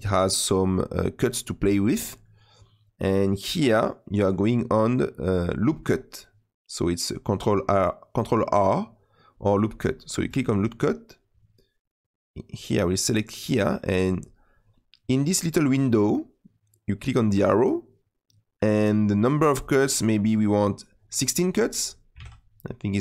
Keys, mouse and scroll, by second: 10.3-23.0 drag.